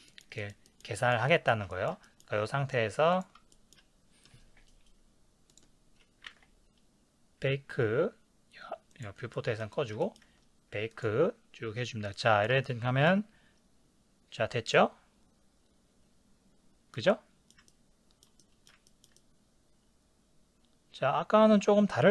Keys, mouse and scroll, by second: 5.6-9.0 drag, 9.3-11.5 middle drag, 10.0 ctrl+scroll down 1, 11.5-12.2 drag, 12.2-22.1 shift+middle drag.